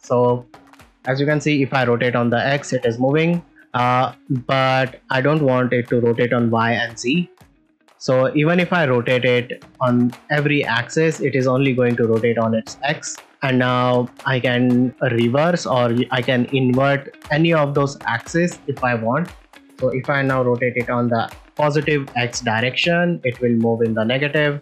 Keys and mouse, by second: 0.0 click, 1.5 r, 3.5 x, 6.9 click, 7.4 r, 7.6 r, 15.2 click, 15.9 click, 18.9 click, 21.4 r, 21.4 x.